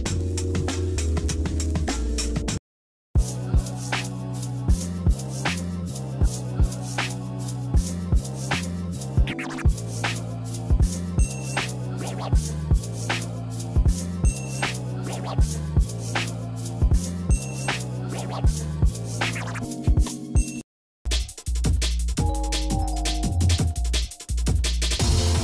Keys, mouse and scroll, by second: 6.7 shift+middle click, 7.7 shift+middle click, 8.5 middle click, 9.0-9.7 scroll up 2, 9.7 shift+middle click, 10.4 shift+middle click, 11.3 click, 11.7 shift+middle click, 12.5-12.9 scroll up 1, 13.8 g, 15.3-15.9 scroll down 3, 16.0 middle click, 16.4 shift+middle click, 16.9 Tab, 17.3 middle click, 17.8 shift+middle click, 18.2 middle click, 18.5-18.9 scroll down 2, 19.0 shift+middle click, 19.0 shift+scroll up 1, 19.8 ctrl+z, 20.7 shift+middle click, 21.4 Tab, 22.6 ctrl+s.